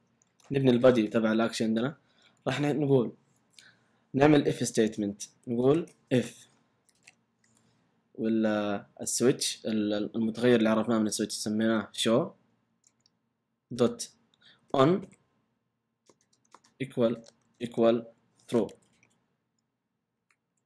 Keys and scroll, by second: 0.2 typing, 0.9 Left, 1.0 Return, 2.4 Up, 5.4-7.4 typing, 8.9 typing, 11.6-12.8 typing, 12.8 Return, 14.4-20.1 typing.